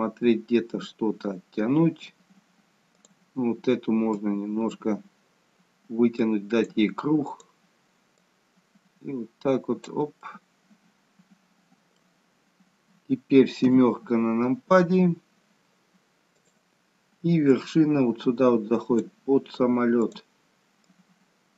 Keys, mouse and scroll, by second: 3.0 click, 4.3 click, 8.2 click, 10.3 middle click, 13.6 KP_7, 16.3 click, 17.6 click.